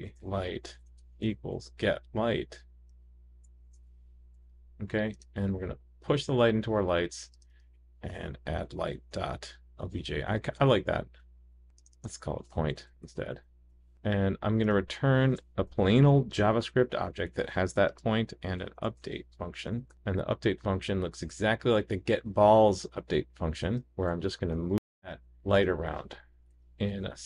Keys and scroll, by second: 0.0 super+d, 0.1 super+d, 12.8 super+d, 13.0 super+d, 25.0 super+c, 26.5 super+v.